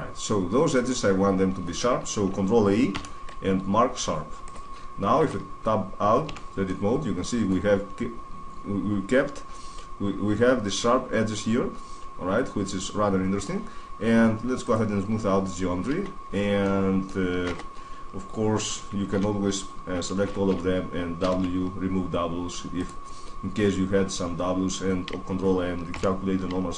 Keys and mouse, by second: 2.7 ctrl+e, 5.0 Tab, 6.0 z, 6.8 middle click, 8.1-9.4 middle drag, 11.0-13.0 middle drag, 14.4-16.2 drag, 15.4-16.2 middle drag, 17.3 Tab, 18.8 w, 20.0 a, 20.2 a, 21.0 w, 26.2 ctrl+b.